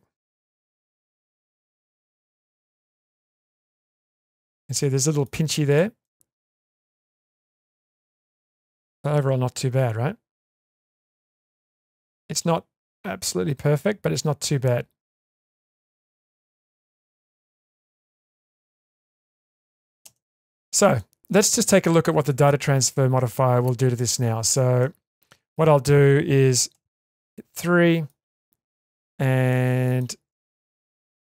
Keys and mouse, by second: 1.1 Tab, 1.5 Tab, 2.1 alt+z, 3.3-4.3 middle drag, 5.0 shift+middle drag, 5.7 click, 6.0-6.9 middle drag, 7.0 Tab, 7.4-18.0 middle drag, 18.3 shift+space, 21.0-21.6 middle drag, 21.8-22.2 shift+middle drag, 22.4-24.1 middle drag, 24.8 shift+middle click, 25.4 Tab, 26.7 3, 27.3-28.1 middle drag, 29.5-30.0 middle drag.